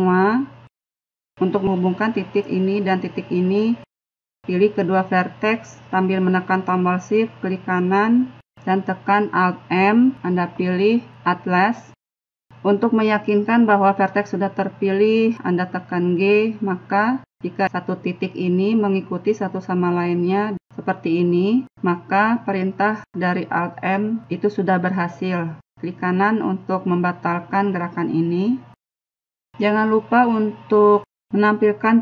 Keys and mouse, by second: 0.9-3.8 middle drag, 7.8 right click, 28.0-30.5 middle drag.